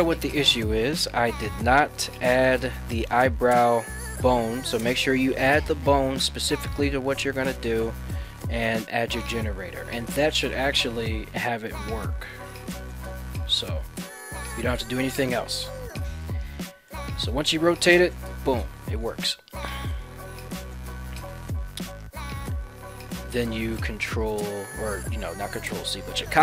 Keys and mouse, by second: 11.7 right click, 12.2 ctrl+Tab, 12.9 middle click, 13.3 r, 16.4 right click, 16.7 middle click, 17.2-17.5 middle drag, 17.7 r, 19.2 right drag, 19.7 middle click, 21.5 ctrl+Tab, 21.9 right click, 23.1-26.3 right drag.